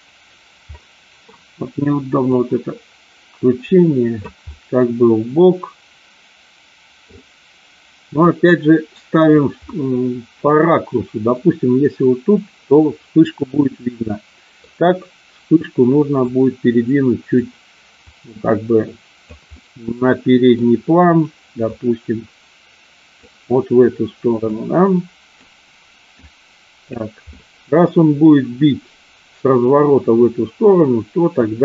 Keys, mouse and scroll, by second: 0.8 middle click, 2.3-4.3 drag, 4.4-7.1 middle drag, 8.3 click, 9.6-11.3 middle drag, 13.8-14.7 middle drag, 16.2-17.3 drag, 18.1-19.3 drag, 19.6 middle click, 21.7 click, 24.5-25.3 drag, 26.2 click, 27.3 scroll up 1, 27.5 middle click, 30.6 middle click, 31.2 scroll down 1.